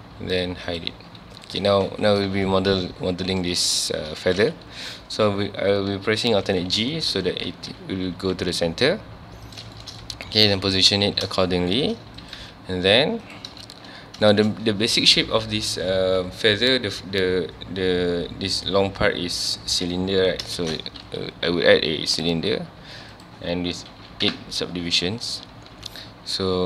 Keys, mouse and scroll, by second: 0.7 click, 1.3 click, 1.7 ctrl+s, 2.1 scroll up 1, 2.5-3.8 shift+middle drag, 3.8 scroll up 1, 4.1-4.8 scroll down 1, 6.5 alt+g, 6.9-7.2 shift+middle drag, 7.2 scroll up 1, 8.0 g, 9.6 click, 9.8-10.1 shift+middle drag, 10.1 scroll up 1, 10.5 alt+a, 11.0 ctrl+s, 11.4-12.2 shift+middle drag, 12.2 click, 12.5 g, 13.3 click, 14.1 scroll down 1, 14.3-17.3 shift+middle drag, 23.1-24.3 drag, 24.3 KP_Enter, 25.7 Tab.